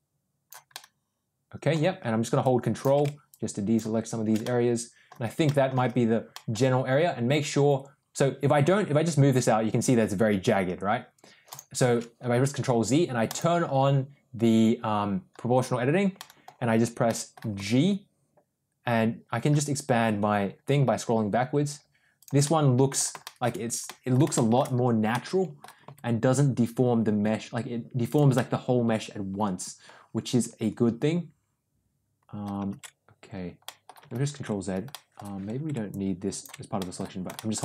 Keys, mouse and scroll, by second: 0.6-1.6 middle drag, 2.3 ctrl+click, 3.2 ctrl+click, 4.3 middle click, 5.3 middle click, 6.2 middle click, 8.5 g, 11.8 ctrl+z, 13.1 click, 16.1 middle click, 16.9 middle click, 17.4 g, 22.3 middle click, 23.1 shift+middle click, 23.8 middle click, 24.2 shift+middle click, 25.0 middle click, 25.7 g, 28.2-32.4 middle drag, 32.6 ctrl+z, 33.5 middle click, 34.8 middle click, 35.8 ctrl+click, 36.6 middle click, 37.2 shift+middle click.